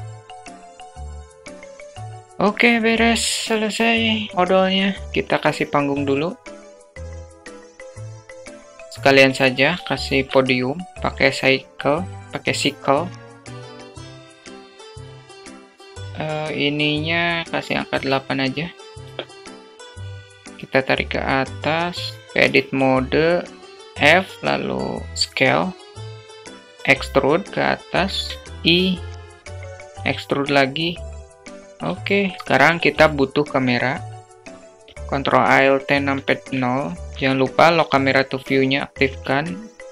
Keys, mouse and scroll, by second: 0.2 click, 0.5 click, 0.7 Tab, 0.8 alt+z, 0.8 alt+middle click, 1.0 `, 1.2 Tab, 1.3 alt+z, 1.3 click, 1.4 alt+z, 1.5 click, 1.8 alt+z, 1.8 click, 1.8 alt+z, 2.0 click, 2.1 Tab, 2.2 alt+shift+middle drag, 4.6 shift+a, 5.1 s, 6.6 alt+middle click, 6.7 s, 6.8 Tab, 7.1 alt+shift+middle click, 7.2 e, 7.6 click, 7.6 ctrl+b, 8.0 Tab, 8.1 right click, 8.1 `, 8.4 alt+shift+click, 8.6 click, 8.7 ctrl+click, 8.8 alt+shift+click, 9.5-10.2 drag, 10.6 middle click, 11.3 shift+a, 15.6 click, 17.7-21.8 drag, 22.7 Tab, 24.3 f, 25.4 s, 27.0 e, 28.7 i, 30.1 e, 31.7 Tab, 32.2 alt+middle click, 32.4 ctrl+shift+z, 33.0 shift+a, 37.1 q, 39.2 alt+middle click, 39.7-39.9 shift+middle drag.